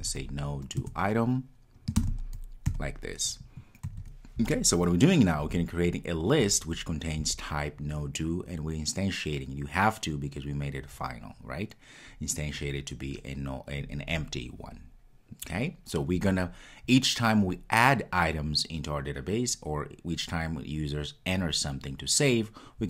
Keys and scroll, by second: 0.8 Return.